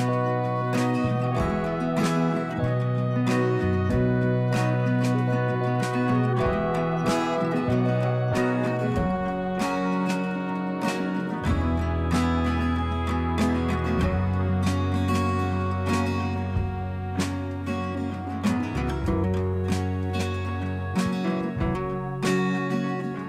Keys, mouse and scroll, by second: 3.5 click, 5.9 d, 14.3 d, 19.6 d, 21.8 a.